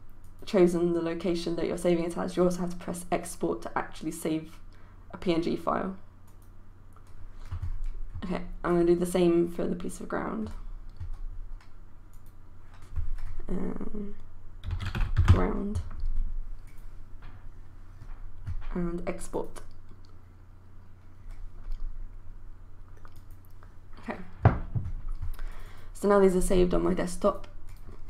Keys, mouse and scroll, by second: 14.5-15.9 typing, 16.7 click.